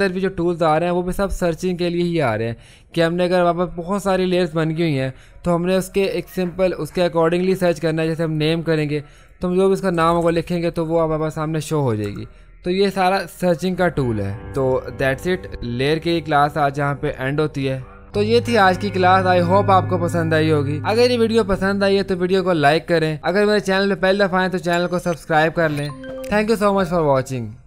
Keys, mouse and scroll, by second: 8.4 click, 8.4 typing, 10.0-10.8 typing, 10.8-17.4 drag, 13.5 typing.